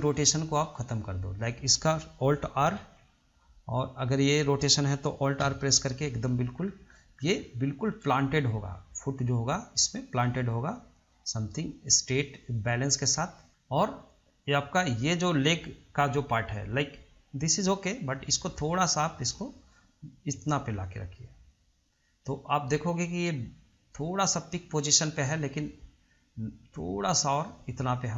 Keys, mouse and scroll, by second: 0.4-1.2 shift+middle drag, 1.2 click, 2.9 alt+r, 4.3 drag, 5.6 alt+r, 6.8-7.7 scroll down 3, 7.7-9.5 shift+middle drag, 9.5 click, 10.4 click, 13.5-15.7 scroll down 1, 18.1 click, 19.9-22.9 drag, 25.2 click, 26.5 click.